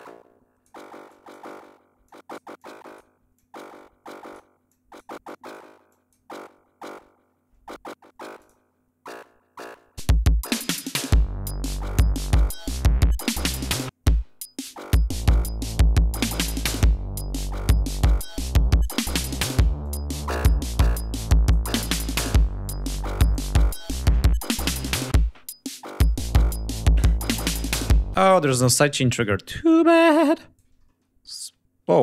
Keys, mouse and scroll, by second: 0.0 click, 1.0 click, 2.0 click, 2.5 click, 3.3 click, 4.0-4.4 drag, 4.6 click, 5.1 click, 5.8 click, 8.3 click, 9.9 click, 10.6 click, 13.6 click, 16.2 click, 18.7 click, 19.7-21.6 drag, 22.1 click, 23.2 click, 26.2-27.1 scroll up 4, 27.7 ctrl+scroll up 2, 28.1 ctrl+space, 28.3 ctrl+scroll down 2, 28.8-29.6 drag, 30.1 click, 30.8 ctrl+middle click, 31.8 ctrl+y.